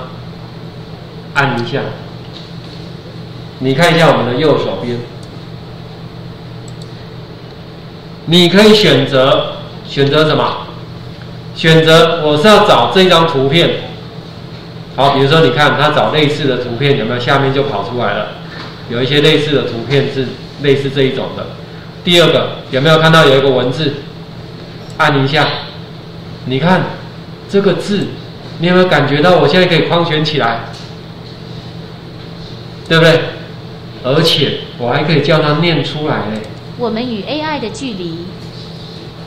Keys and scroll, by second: 2.7 ctrl+4.